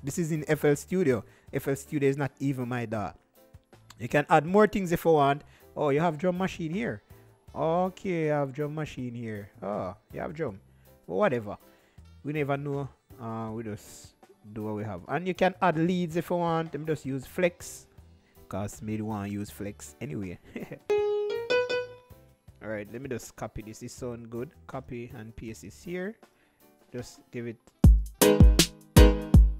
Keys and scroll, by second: 12.9-14.2 typing.